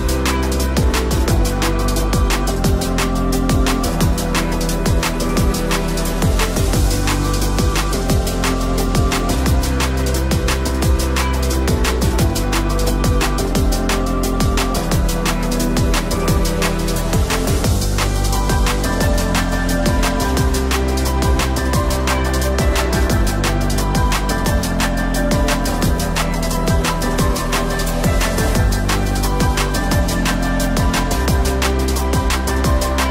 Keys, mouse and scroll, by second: 0.0 Tab, 0.0 click, 0.1 g, 0.6 click, 0.8 g, 1.7 middle click, 1.9 middle click, 2.3 Tab, 2.5 click, 2.5 3, 2.8 Delete, 3.1 middle click, 3.3 click, 3.8 middle click, 4.8 click, 5.0 middle click, 5.5 shift+click, 5.7 KP_Decimal, 5.9-6.2 scroll down 1, 6.2 middle click.